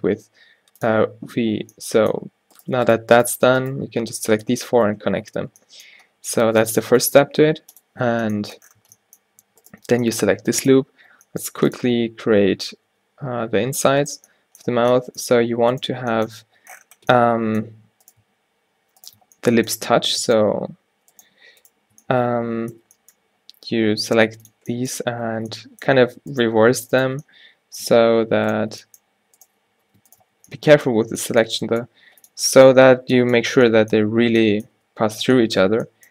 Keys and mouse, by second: 4.5 f, 4.9 Tab, 5.5 z, 6.9 a, 7.9-8.9 drag, 8.9 Tab, 11.2 e, 12.5 s, 16.6 a, 17.6 click, 18.2-19.8 drag, 22.2-23.6 drag, 23.0 g, 26.5-32.0 drag, 28.8 g, 29.9 z, 30.5 z, 31.2 z, 31.7 g, 33.0 z, 34.9 Tab, 35.8 Tab.